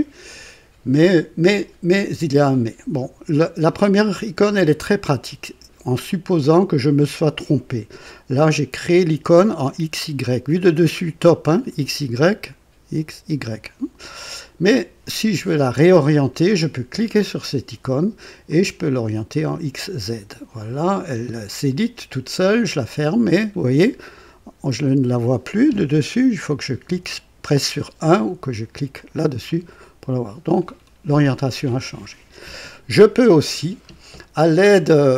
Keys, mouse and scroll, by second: 17.1 click, 18.4 click, 19.3 click, 22.4 click, 26.9 KP_1, 28.9 click, 29.7 right click.